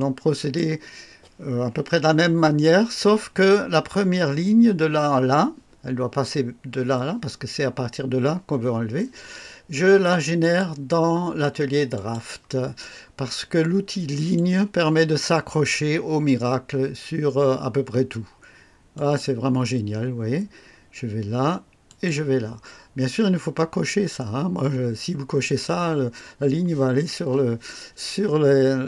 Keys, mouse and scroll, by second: 0.0-0.7 right drag, 10.4 click, 11.9 click, 14.1 click, 18.9 click, 21.9 click.